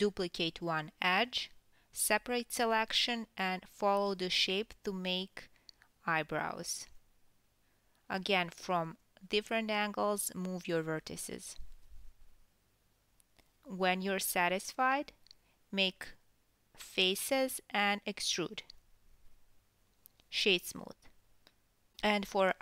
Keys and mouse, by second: 0.2 KP_1, 0.9-18.7 ctrl+right drag, 1.1 Tab, 1.4-5.2 typing, 1.5-1.9 drag, 7.0 g, 8.3-12.3 typing, 9.4-10.1 drag, 14.2-17.3 typing, 14.6-15.2 drag, 14.6-15.2 middle drag, 16.0 drag, 16.0 middle drag, 17.9 Tab, 18.2-18.7 ctrl+drag, 18.2-18.7 ctrl+middle drag, 18.9 Tab, 19.0 a, 19.9 e, 20.4-21.4 drag, 20.5 Tab, 21.4 KP_1, 21.8-22.2 ctrl+shift+drag, 22.2 ctrl+middle drag, 22.2 ctrl+right drag, 22.3 shift+drag, 22.4 middle drag, 22.4 right drag, 22.5 ctrl+click.